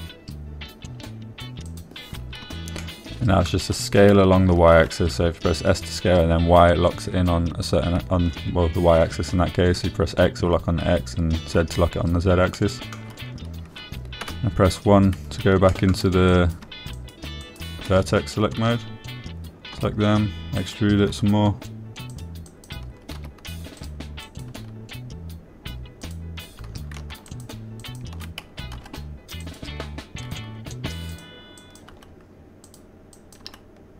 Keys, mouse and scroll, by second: 3.1 click, 4.2 shift+click, 13.9 shift+click, 15.6 1, 17.1 shift+click, 17.7 click, 18.3 shift+click, 18.8 shift+click, 22.0 click, 23.5 click, 23.9 click, 25.2 click, 25.7 click, 25.9 g, 27.4 click, 28.7 shift+click, 29.3 shift+click, 30.8 click, 32.5 click, 33.0 click.